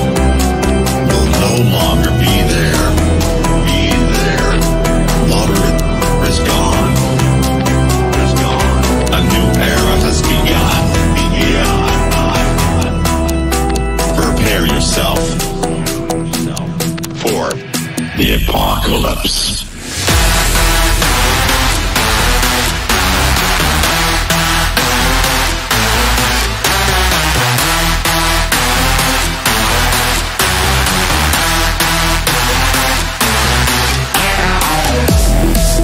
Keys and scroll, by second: 27.2 ctrl+r, 28.6 F3, 29.6 ctrl+r, 30.7 F3, 31.5 ctrl+r.